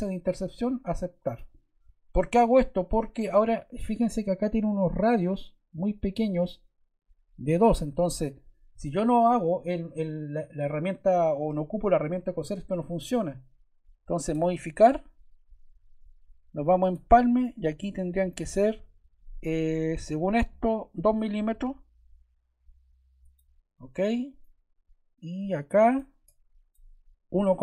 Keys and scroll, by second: 21.4 2.